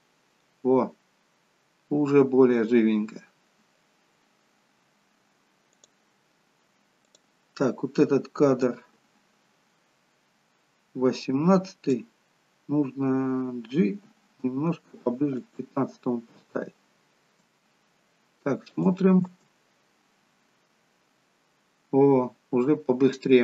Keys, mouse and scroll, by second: 5.9 click, 7.1 click, 13.8 g, 18.8 click, 19.4 space.